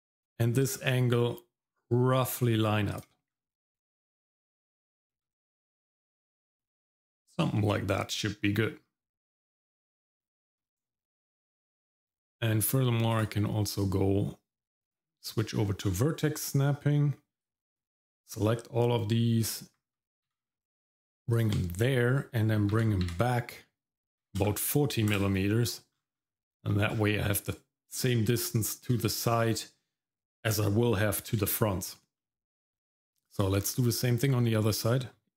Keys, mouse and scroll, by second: 0.5 g, 3.3-3.6 scroll down 1, 5.0 g, 8.4 middle click, 10.1-11.5 scroll up 3, 13.1-15.5 drag, 17.4 click, 19.8 g, 22.7 g, 25.9-26.5 scroll down 3, 26.5 middle click, 26.9-29.2 scroll down 1, 32.2 middle click, 32.7-33.1 scroll up 1, 33.1 click, 33.5-34.3 scroll up 3, 34.3 middle click.